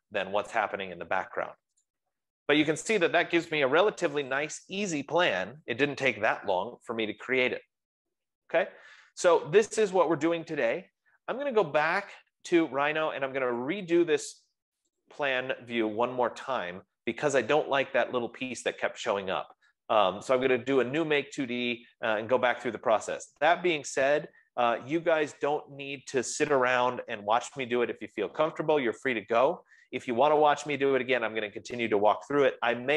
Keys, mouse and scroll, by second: 2.2-7.2 drag, 15.7-20.3 drag.